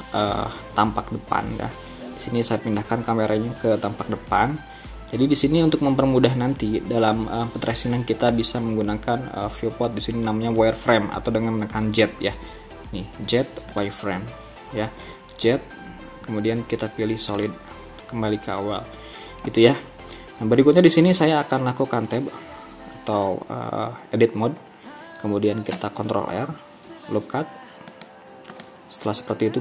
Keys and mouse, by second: 1.4 KP_1, 12.4 z, 15.2 z, 15.8 z, 16.6 z, 22.3 Tab, 25.8 ctrl+r.